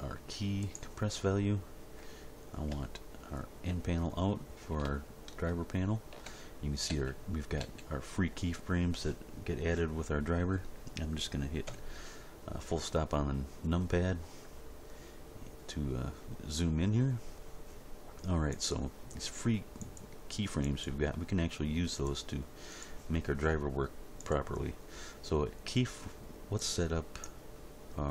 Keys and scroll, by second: 2.7 n, 6.9 a, 11.6 Delete.